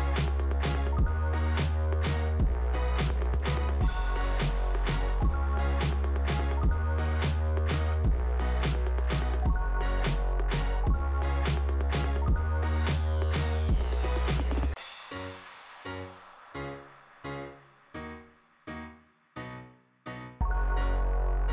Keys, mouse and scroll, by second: 0.4 ', 0.8 click, 2.5 click, 9.3 click, 9.4 click, 10.8 click, 13.9 click, 14.5 click, 14.9 click, 15.0 click, 15.5 click.